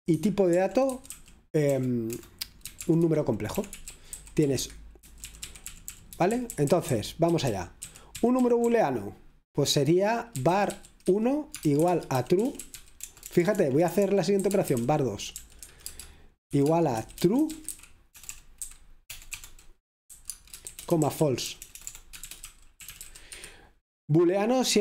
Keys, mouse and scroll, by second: 0.2 Escape, 1.4-8.7 typing, 10.2-23.8 typing.